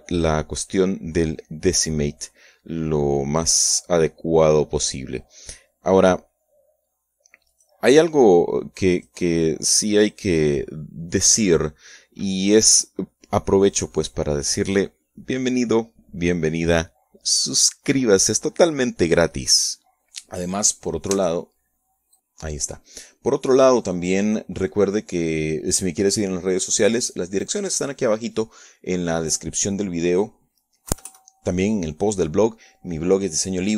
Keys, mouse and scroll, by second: 10.2 right click, 14.4-15.4 shift+right drag, 15.4 shift+click, 17.0 Tab, 24.4 scroll up 2, 24.6 scroll down 2, 26.8 KP_Add.